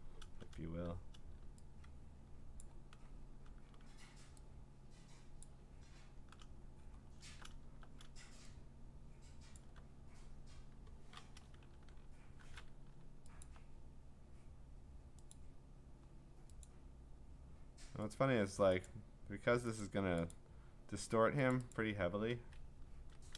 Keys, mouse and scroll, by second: 2.6 shift+click, 5.4 shift+click, 8.1 middle click, 9.6 alt+click, 13.4 alt+click, 15.3 click, 16.6 click, 18.1 click, 18.9 click, 19.8 click, 20.3 click, 21.5 click, 21.8 click, 22.7 Escape.